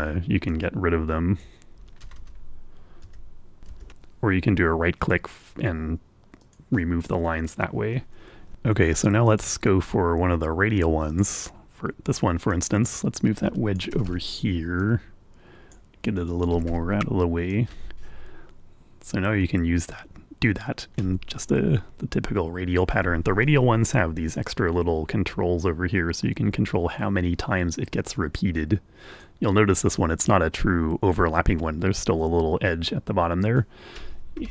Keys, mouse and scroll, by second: 0.8 l, 1.7-2.8 drag, 3.1 Return, 3.8 l, 4.7 l, 5.6 right click, 9.6 click, 11.5 click, 12.9-14.3 drag, 14.3 Return, 15.1-16.3 drag, 16.4 click, 16.9 Return, 17.8-23.3 drag, 24.8-29.7 drag.